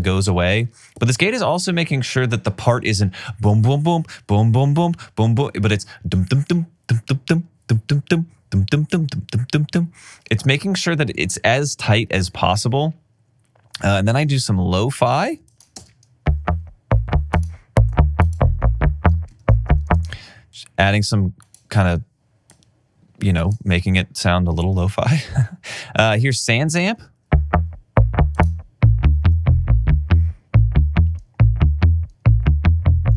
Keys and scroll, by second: 12.2 alt+super+w, 15.8 super+space, 19.4 alt+super+w, 19.9 space, 26.8 space.